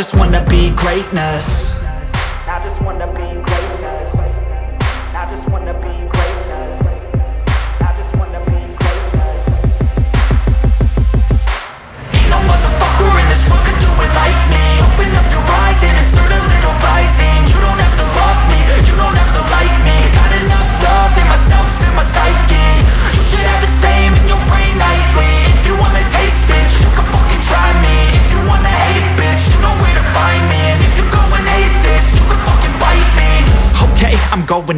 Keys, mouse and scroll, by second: 3.5 click, 8.2 click, 15.7 click, 21.1 space, 21.2 click, 21.6 space, 21.8 click, 22.3 space, 22.4 click, 28.8 click, 33.5 click.